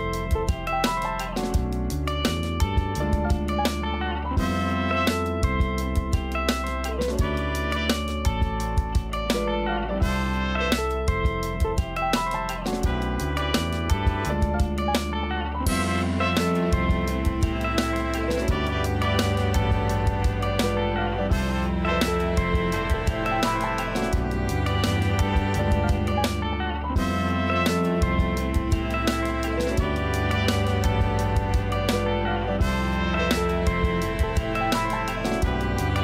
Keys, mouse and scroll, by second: 0.4 ctrl+z, 1.4 KP_1, 1.9 KP_7, 2.5-2.8 scroll up 1, 2.8 r, 4.3-5.7 middle drag, 5.7 KP_3, 6.0 KP_3, 6.4 scroll up 1, 6.8 g, 8.2-9.5 middle drag, 9.5-9.9 scroll down 2, 9.9 a, 10.0 a, 11.3 Tab, 11.9 scroll down 2, 12.2 a, 12.4 a, 13.0-13.8 shift+middle drag, 13.8-14.4 scroll up 2, 14.4-14.8 scroll down 2, 14.8 a, 15.0 a, 15.5-15.9 scroll down 1, 15.9-16.5 middle drag, 16.5-17.2 scroll up 5, 17.2-18.2 shift+middle drag, 18.2 click, 18.7 Tab, 20.9 l, 22.0 l, 22.4-22.9 scroll down 3, 22.9 KP_1, 23.4 scroll up 1, 23.9 g, 27.4 a, 27.5 a, 28.7-29.4 scroll up 1, 29.4-29.8 scroll down 2, 29.8-30.5 scroll up 1, 30.5 Tab, 30.7 scroll down 3, 30.9 a, 31.0 a, 31.3-32.5 scroll up 1, 32.6-33.4 scroll up 1, 33.4-36.0 scroll up 1.